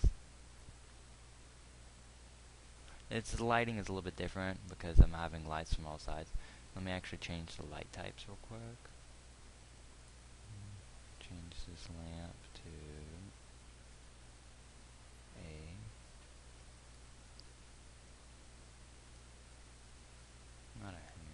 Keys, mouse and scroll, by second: 6.6 Escape.